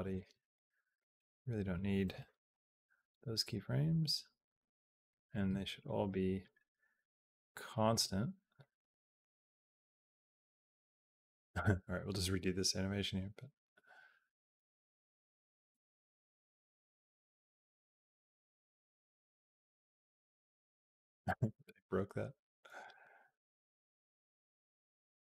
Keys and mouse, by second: 0.1 b, 2.4 Delete, 3.4-4.9 drag, 5.1 click, 5.3 b, 6.3-7.6 right drag, 7.7 click, 8.5-22.6 drag, 22.7 space.